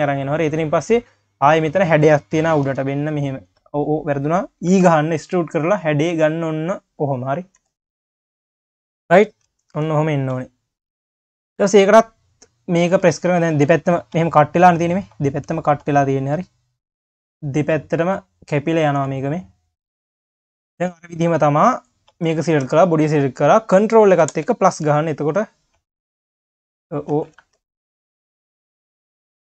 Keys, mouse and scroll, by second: 0.9 scroll up 2, 8.0-8.6 scroll down 4, 12.2 2, 13.2 q, 13.4 q, 14.1 q, 17.1 drag, 17.5-18.1 scroll down 1, 18.1-19.2 drag, 19.2 scroll down 4, 19.5 q, 21.2 q, 22.5 shift+click, 24.3 ctrl+KP_Add, 24.9 q, 26.5 q, 27.4 ctrl+z, 27.9 q, 28.6 drag, 29.0 q.